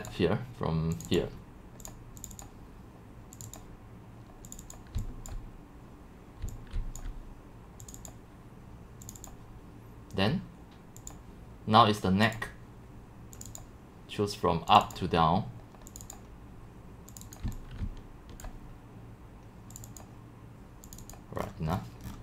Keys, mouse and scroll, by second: 0.1-5.0 drag, 5.3-6.5 drag, 6.2-7.3 typing, 7.0-9.9 drag, 11.1 click, 12.5-15.8 drag, 17.2 click, 17.4 click, 17.4-18.9 typing, 18.5-21.4 drag, 21.4 middle click, 21.4-21.8 scroll, 21.8 scroll down 1, 22.0 scroll down 1, 22.0-22.2 typing, 22.1 scroll, 22.1 scroll down 1.